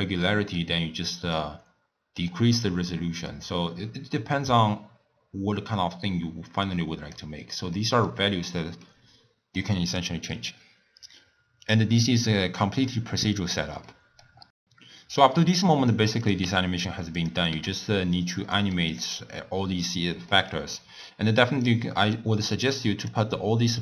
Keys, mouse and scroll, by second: 1.3-4.3 drag, 7.7-11.8 middle drag, 12.4-13.4 middle drag, 13.4-13.8 scroll down 1, 13.8 middle click, 16.2 click, 16.5 e, 17.5 g, 18.5 middle click, 18.9 click, 20.3 middle click, 20.6-21.6 scroll up 1, 21.6 drag, 23.7 drag.